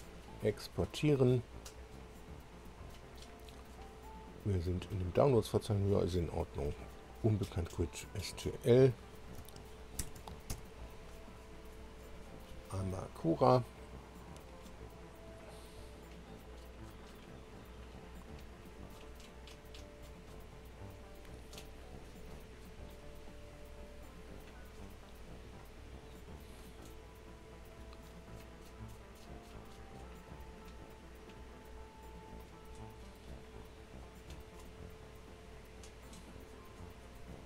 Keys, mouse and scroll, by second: 8.3 click, 10.0 ctrl+alt+b, 10.5 ctrl+alt+b, 15.5 click.